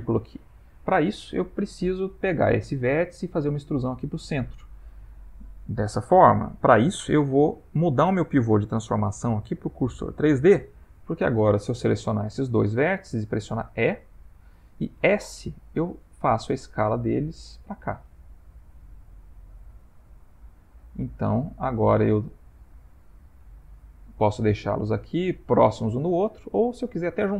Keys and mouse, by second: 8.6 click, 12.2 shift+click, 13.7 e, 20.7 s, 23.6 middle click, 26.2 ctrl+middle click.